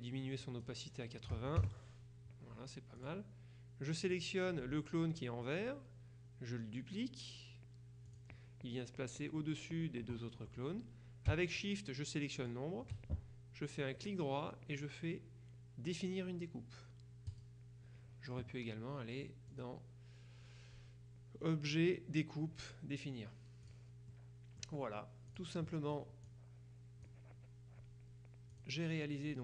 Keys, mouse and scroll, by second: 0.5 click, 1.4 KP_8, 1.7 KP_Enter, 3.0 click, 4.2 click, 8.2 click, 12.5 shift+click, 14.1 click, 17.4 click, 19.6 click, 23.7 click, 25.4 click, 26.3 click, 28.6 click.